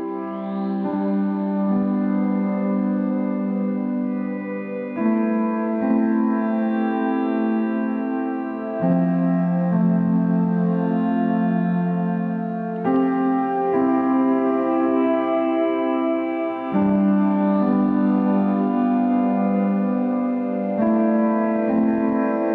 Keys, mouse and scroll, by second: 2.8-7.5 drag, 7.5-8.0 scroll up 2, 8.0 middle click, 9.0-16.0 drag.